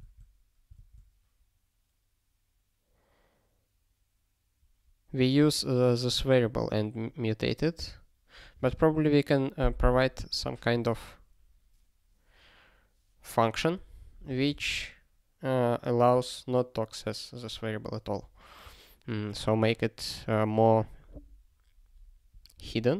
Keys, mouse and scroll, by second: 0.0 ctrl+g, 18.0 ctrl+g.